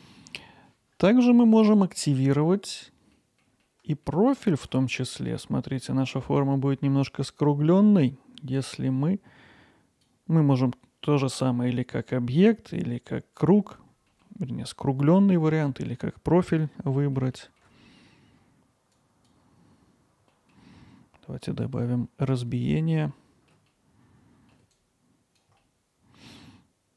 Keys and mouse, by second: 2.6 click, 3.1 middle click, 3.3 click, 3.6 alt+middle click, 4.4 ctrl+alt+middle click, 4.8 middle click, 6.2-10.1 drag, 14.1-16.5 middle drag, 16.5 click, 17.0 alt+middle click, 17.3 ctrl+alt+middle click, 18.9 click, 20.3 alt+middle click, 21.4 click, 22.6 alt+middle click, 23.1-23.5 ctrl+alt+middle drag, 23.7-24.5 alt+middle drag, 25.1 click, 25.6-26.9 alt+middle drag.